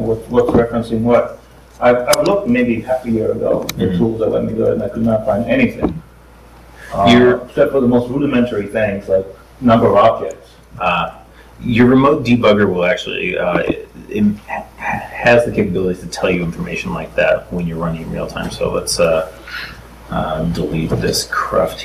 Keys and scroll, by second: 10.9 super+Tab, 11.5 super+Tab.